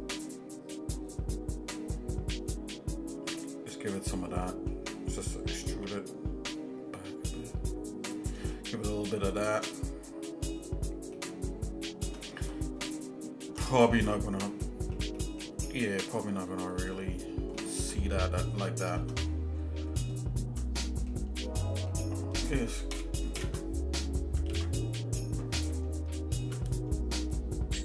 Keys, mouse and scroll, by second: 4.4 shift+middle click, 5.7 e, 8.5 shift+middle click, 9.4 shift+middle click, 10.3 scroll up 1, 11.2-12.2 shift+middle drag, 12.3 scroll down 2, 12.9 shift+middle click, 12.9-13.2 scroll down 1, 13.7 middle click, 14.2 scroll up 2, 14.6 middle click, 15.2 shift+middle click, 15.7 shift+middle click, 16.2-16.7 scroll up 4, 16.9-17.3 scroll down 2, 17.6 shift+middle click, 18.0 scroll down 2, 18.7 shift+middle click, 19.3-19.9 scroll up 3, 20.8 middle click, 21.5 shift+middle click, 22.9 ctrl+KP_Add, 23.5 ctrl+KP_Add, 24.5 ctrl+z.